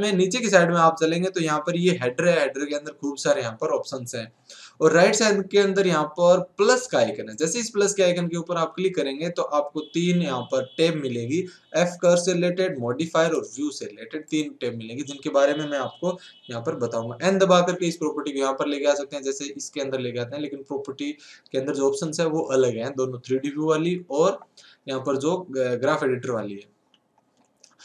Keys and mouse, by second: 18.9 n, 19.1 n, 19.5 n, 19.8 n.